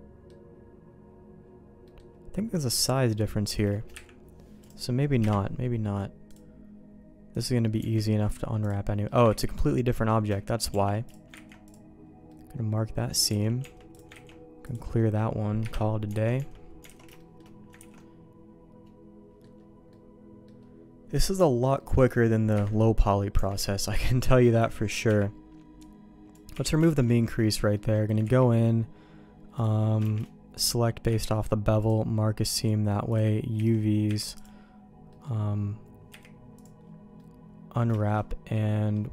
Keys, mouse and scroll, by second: 1.0 ctrl+z, 1.0 middle click, 1.4-1.9 scroll down 1, 1.9 middle click, 3.9 Delete, 4.6 right click, 5.2 KP_Divide, 6.3 click, 7.8 Tab, 8.6 click, 8.9 middle click, 9.3 ctrl+e, 10.7 shift+g, 11.5 ctrl+e, 12.3 middle click, 13.4 alt+a, 13.6 Tab, 13.9 click, 14.3 ctrl+e, 15.0 middle click, 15.6 KP_Divide, 16.2 alt+a, 16.4 Tab, 16.5 middle click, 16.9 alt+a, 17.2 shift+middle click, 17.8 ctrl+s, 18.0-19.4 middle drag, 19.9 middle click, 20.6-21.9 middle drag, 22.5 KP_Divide, 23.4 Tab, 23.7 shift+middle click, 24.6 a, 25.1 n, 25.8 click, 26.5 n, 26.8 shift+middle click, 27.4 middle click, 27.7 middle click, 28.2 ctrl+e, 29.6 click, 30.2 shift+g, 31.1 ctrl+e, 33.6 a, 34.1 u, 35.1 middle click, 36.1 u, 37.2 middle click, 38.0 shift+middle click, 38.5 middle click.